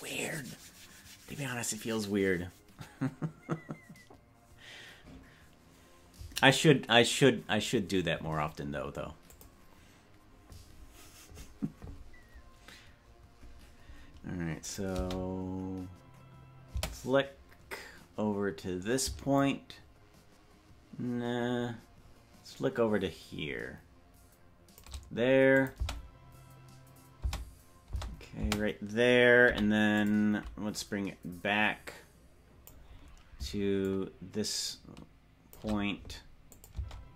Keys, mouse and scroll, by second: 14.7 click, 14.9 space, 16.7 space, 19.3-24.8 shift+drag, 25.6-26.9 drag, 25.8 space, 27.4 space, 28.0 space, 28.6 space, 29.4 i, 30.8-32.7 drag, 33.8-35.5 shift+drag, 36.5-37.1 drag, 36.8 space.